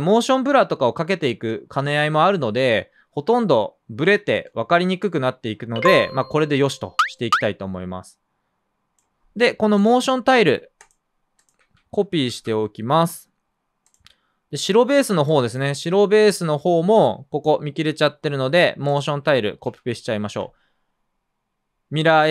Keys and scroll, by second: 9.5 space, 12.2 super+c, 19.6 super+v.